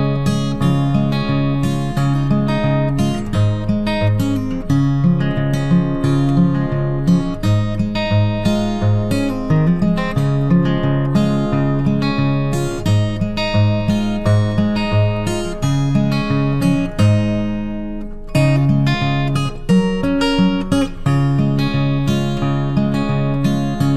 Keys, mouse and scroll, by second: 2.3-5.6 typing, 6.9 typing, 9.2-10.0 typing, 10.2 ctrl+d, 11.0 typing, 12.8-13.6 typing, 20.9 a, 22.6 click.